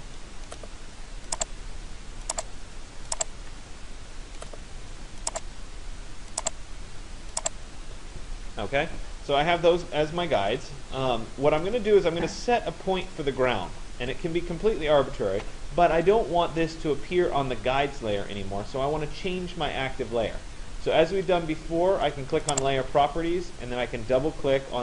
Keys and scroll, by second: 7.4 Return.